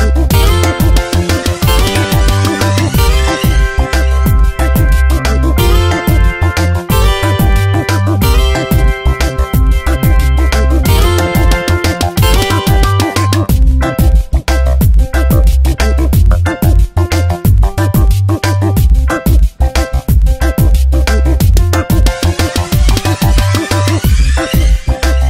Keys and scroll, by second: 5.2 Tab, 6.7 space, 7.2 v, 8.1 Tab, 13.0 Return, 13.6 shift+Right, 14.6 Down, 18.9 Delete.